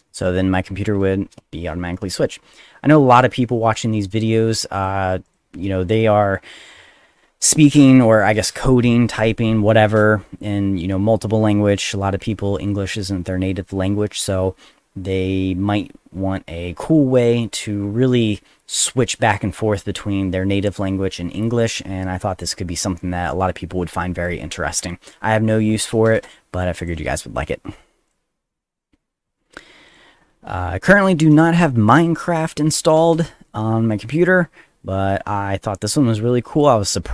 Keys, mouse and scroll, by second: 0.2 click, 4.7 click, 5.2 click, 26.1 click, 26.8 click, 28.1 click, 28.8 middle click, 29.9 click.